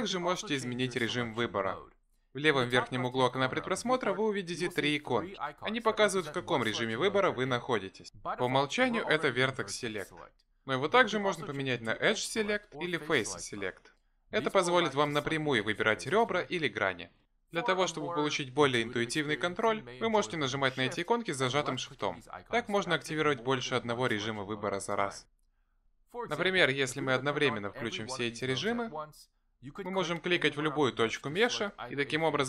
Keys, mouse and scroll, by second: 12.0 click, 13.1 click, 14.6 click, 15.3 click, 15.8 shift+click, 16.5 click, 17.1 click, 17.4 shift+click, 17.8 click, 18.4 click, 19.8 shift+click, 20.5 click, 21.2 shift+click, 22.4 click, 23.4 click, 25.4 shift+click, 27.8 shift+click, 29.2 click, 30.3 click, 30.9 click, 31.6 click, 32.3 click.